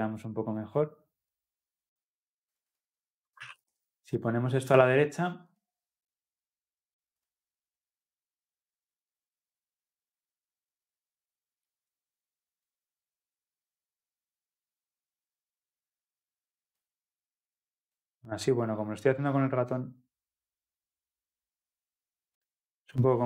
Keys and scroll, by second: 5.6 ctrl+F10.